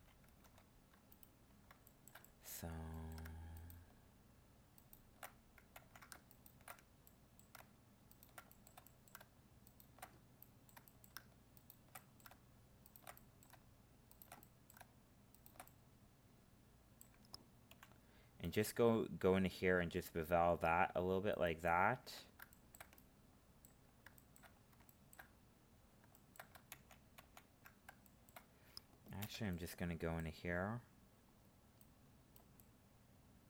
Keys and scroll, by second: 0.4 ctrl+Tab, 5.7 ctrl+z, 26.7 ctrl+z.